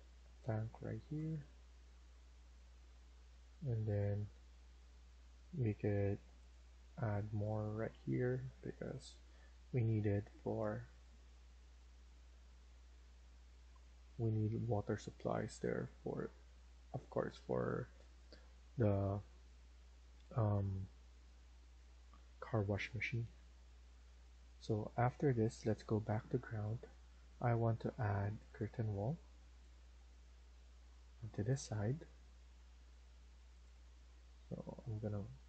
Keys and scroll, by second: 9.4 Escape, 9.7 Escape, 10.0 Escape, 11.5 Escape, 16.0 Escape.